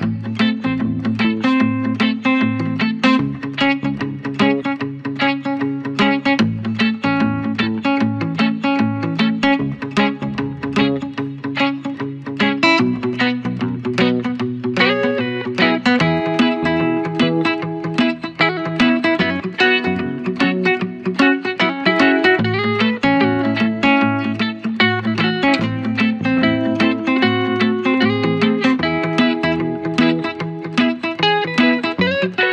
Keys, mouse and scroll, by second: 0.4 scroll up 1, 0.6 scroll down 1, 0.9 ctrl+-, 1.2-3.2 typing, 1.3 click, 3.4 click, 3.9 scroll down 1, 4.6 ctrl+=, 4.7-5.2 scroll down 2, 4.9 ctrl+=, 5.2 ctrl+-, 5.5 click, 5.9-6.2 scroll down 1, 6.5-6.8 scroll down 2, 6.6 ctrl+=, 6.9-7.6 typing, 7.7 alt+click, 8.3 ctrl+z, 8.7 alt+click, 9.4 scroll up 1, 9.7 alt+click, 11.4 scroll up 1, 11.7-12.9 alt+drag, 12.9 scroll up 1, 13.3 alt+click, 14.5 scroll up 1, 14.8 alt+click, 15.7 scroll up 1, 16.2-17.7 alt+drag, 17.7 scroll down 1, 18.1 click, 19.3 scroll up 1, 19.7 typing, 20.1 alt+click, 20.5 scroll up 1, 20.9 scroll down 1, 21.4 alt+click, 21.6 scroll down 1, 22.2-24.6 alt+drag, 24.6 ctrl+-, 25.6 ctrl+-, 27.0 ctrl+-, 28.6-29.1 ctrl+scroll up 1, 29.6-30.5 scroll up 2.